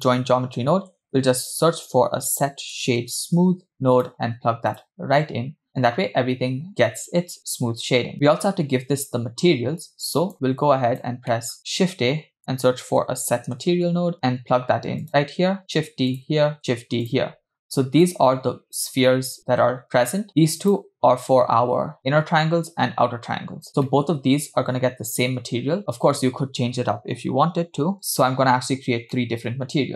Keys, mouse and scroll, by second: 0.5-0.9 scroll up 4, 1.0 shift+a, 9.8-10.3 drag, 10.6 click, 11.4 middle click, 11.6 scroll down 2, 11.8 shift+a, 15.6 shift+d, 16.6 shift+d, 18.0 click, 20.5 click, 23.7 scroll up 2, 23.9 middle click, 28.9 scroll down 1, 29.1 middle click.